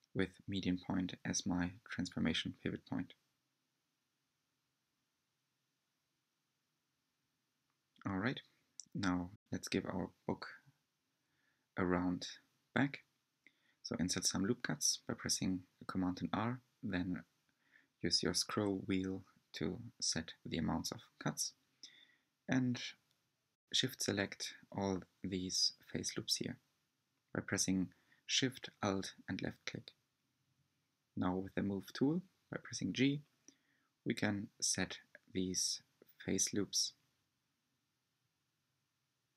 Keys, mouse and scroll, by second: 0.4 s, 6.7-8.8 middle drag, 8.8 click, 9.5-10.0 scroll up 2, 10.0 shift+middle click, 10.6 scroll up 3, 12.0 r, 18.9 3, 20.3 shift+click, 22.5 alt+click, 23.7 alt+shift+click, 24.5 alt+shift+click, 25.1 alt+shift+click, 25.7 alt+shift+click, 26.3 alt+shift+click, 26.9 alt+shift+click, 27.5-28.6 shift+middle drag, 28.6-29.6 scroll up 4, 29.6-30.8 shift+middle drag, 30.8 g.